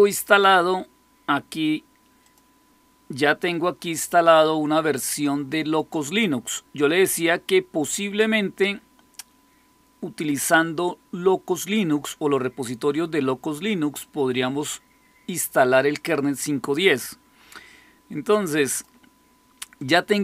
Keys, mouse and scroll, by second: 2.2 click, 3.2 click, 7.3 click, 18.6 click, 19.7 click.